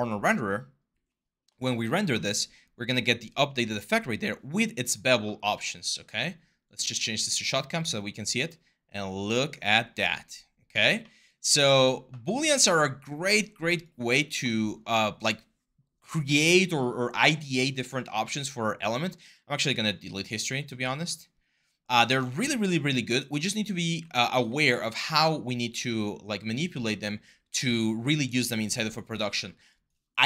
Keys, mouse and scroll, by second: 20.6 w, 21.9 ctrl+z, 23.6 e, 27.2 e.